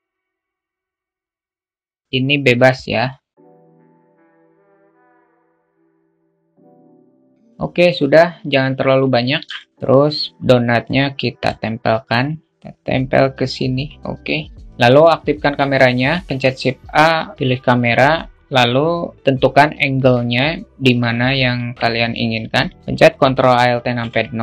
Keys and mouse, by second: 0.4-1.7 drag, 2.0-4.2 drag, 4.6 s, 5.4-6.7 drag, 7.4 alt+middle click, 8.6-9.1 alt+middle drag, 10.3-11.9 drag, 12.2 alt+shift+middle click, 12.5 g, 14.6 alt+middle click, 15.5 shift+a, 19.4-20.4 alt+middle drag, 21.0 alt+middle click, 23.5 ctrl+alt+KP_0.